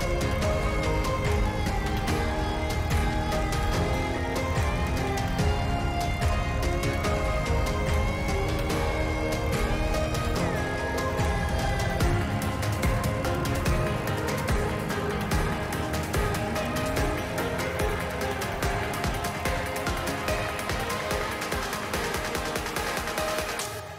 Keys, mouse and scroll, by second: 1.6 Tab, 3.4 alt+h, 3.9 shift+middle click, 4.4 click, 5.4 middle click, 6.2 middle click, 6.6 click, 7.4 middle click, 8.3-9.4 drag, 10.0 middle click, 16.9-19.2 shift+middle drag, 21.1 shift+middle click, 21.7 click, 22.0 Tab, 22.4 click.